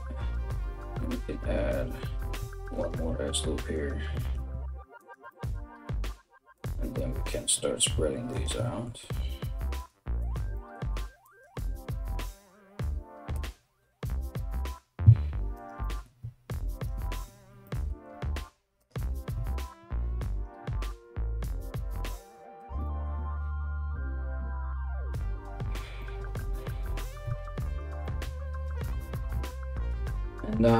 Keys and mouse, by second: 1.7 ctrl+r, 3.3 right click, 3.5-4.6 middle drag, 4.6 right click, 4.7-6.8 ctrl+middle drag, 5.4 g, 6.8 right click, 6.9-7.9 middle drag, 7.9 ctrl+right click, 8.1-9.8 middle drag, 9.8 right click, 10.0 middle click, 10.8 right click, 11.1-15.1 middle drag, 11.5 g, 13.6 KP_1, 15.1 right click, 15.2-16.3 middle drag, 16.3 ctrl+right click, 16.4-19.8 ctrl+middle drag, 17.7 g, 19.1 ctrl+z, 19.8 ctrl+right click, 20.1-30.7 middle drag, 20.6 g, 21.8 g, 23.2 KP_1, 26.8 3, 27.3 right click, 28.2 right click, 28.9 KP_1, 30.6 e.